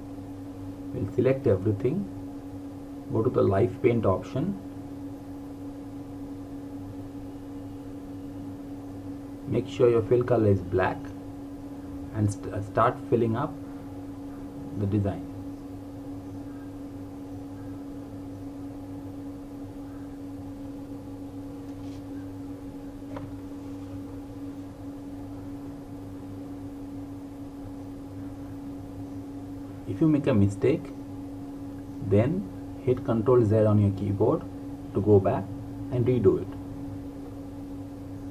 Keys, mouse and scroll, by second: 3.4 click, 8.3 click.